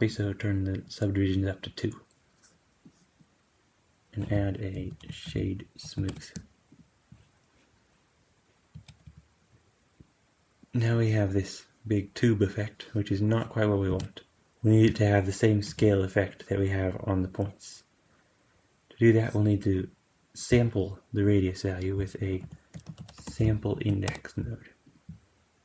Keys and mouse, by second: 4.1 q, 8.6 space, 8.9 g, 13.8 space, 14.3-16.3 drag, 15.6 g, 19.6-24.9 drag, 22.3 q.